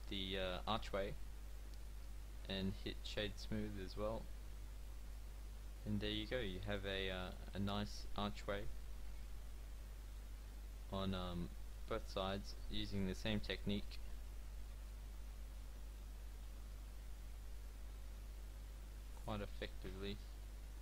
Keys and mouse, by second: 2.4 w, 3.9 Tab, 6.2 middle click, 10.1-12.4 middle drag, 10.3 Tab, 12.5 w, 14.8 Tab, 16.0 Tab.